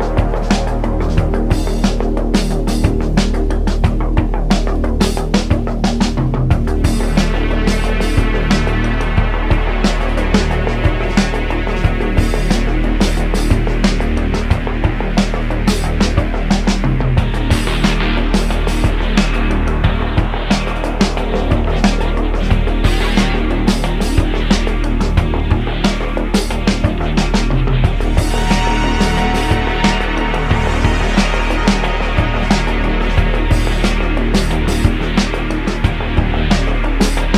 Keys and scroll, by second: 0.5 s, 3.1 Tab, 3.6 Tab, 4.0 super+r, 5.3 Escape, 5.5 super+z, 7.1 k, 11.2 Return, 11.7 1, 12.5 shift+m, 13.8 k, 15.3 Return, 16.7 m, 23.8 Tab, 24.3 s, 26.3 Tab, 26.7 a, 26.9 e, 27.8 3, 29.8 `, 30.7 1, 33.1 Tab, 34.3 Tab, 34.9 Tab.